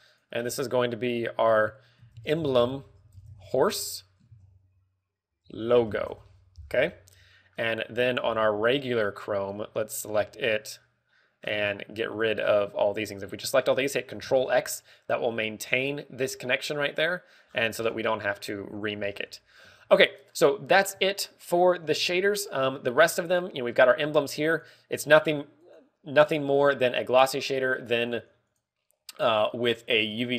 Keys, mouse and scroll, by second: 0.4 click, 0.6 click, 1.0 click, 8.2 middle click, 8.9-9.4 scroll up 10, 9.6 shift+middle click, 10.8 right click, 11.3 shift+middle click, 11.3 right click, 12.3-12.6 scroll down 6, 13.1 click, 13.5 shift+click, 14.5 shift+click, 15.2 ctrl+x, 18.4-19.0 scroll down 12, 19.1 shift+middle click, 19.5 scroll up 2, 19.9 ctrl+w, 20.8 shift+middle click, 21.6 scroll up 1, 22.1 shift+middle click, 24.2 scroll up 1, 25.6 right click, 25.6 scroll up 2, 26.8 right click, 28.8 click.